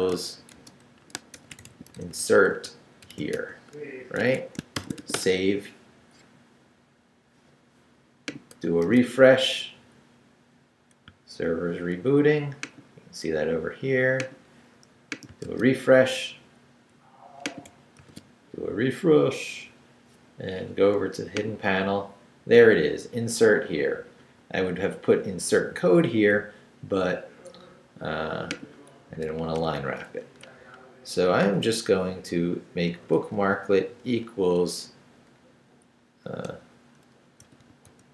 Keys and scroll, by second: 0.0-5.5 typing, 0.9 shift+Left, 4.2 Escape, 8.8 super+r, 15.4 super+r, 18.0 super+r, 29.1 Right, 30.5 Right, 31.5 i, 31.9 BackSpace, 33.1 BackSpace, 36.5-38.1 typing.